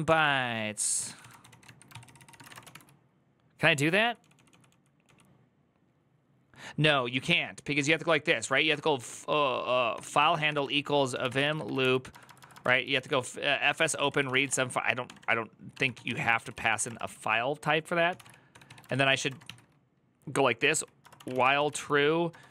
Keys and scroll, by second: 0.0-4.8 typing, 7.6 typing, 10.2-22.5 typing.